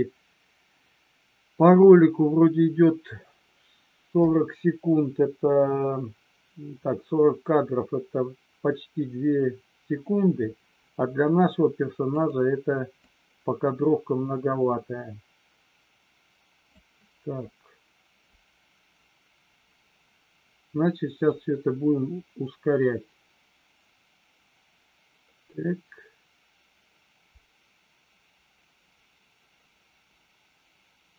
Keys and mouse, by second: 12.1 click, 13.0 click, 21.3-31.1 drag.